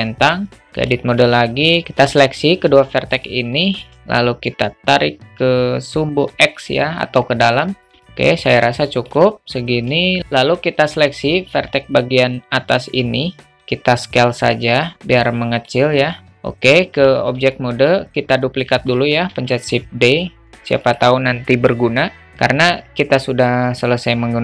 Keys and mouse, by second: 0.5 Tab, 0.5 alt+z, 1.0 shift+middle click, 1.7 click, 1.8 ctrl+z, 3.6 shift+middle click, 4.6-6.6 drag, 6.8 middle click, 7.8 middle click, 8.0 alt+middle click, 8.9 middle click, 10.2 alt+middle click, 12.2 click, 14.0-15.7 drag, 16.2 alt+middle click, 17.0 Tab, 17.6 alt+shift+middle click, 19.0 shift+d.